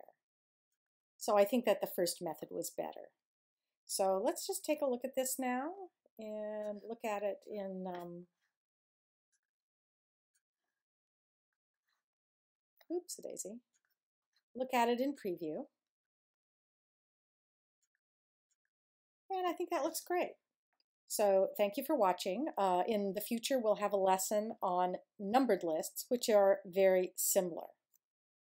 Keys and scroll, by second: 4.6 super+0.